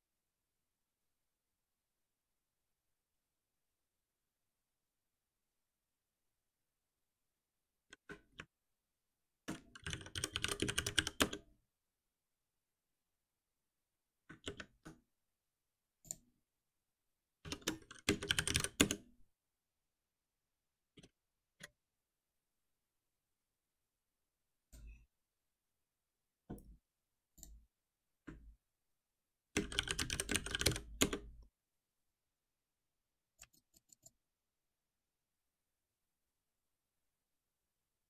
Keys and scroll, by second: 9.1 shift+F6, 17.4 shift+F6, 28.9 shift+F6.